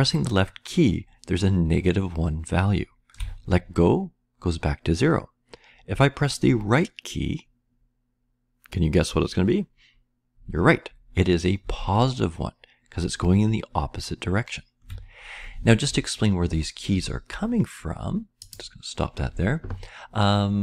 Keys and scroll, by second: 12.1-14.9 Right.